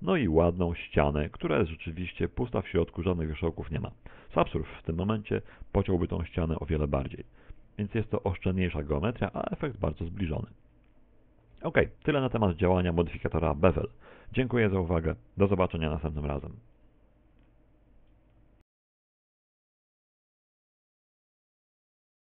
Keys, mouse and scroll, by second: 3.7-4.1 scroll down 4, 4.1 shift+middle click, 4.7 right click, 4.9 right click, 5.5 shift+right click, 6.1 right click, 7.3 shift+right click, 9.5 Tab, 10.2 z, 10.9 middle click, 12.0 shift+middle click, 13.1 Tab, 13.7 z, 14.0 a, 14.3 z, 15.1 Tab, 15.5 z.